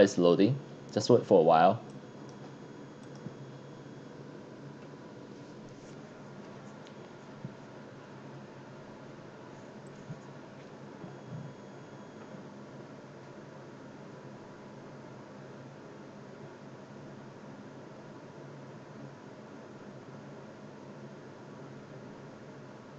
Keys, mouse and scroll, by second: 1.9 click, 3.0 click.